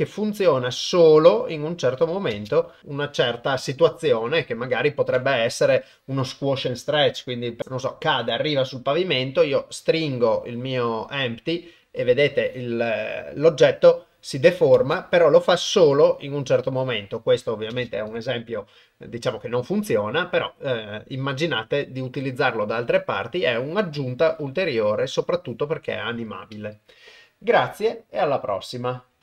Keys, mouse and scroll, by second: 2.4 shift+space, 2.8 click, 7.6 g, 9.5 s, 13.9 click, 14.8 shift+space, 17.8 shift+space.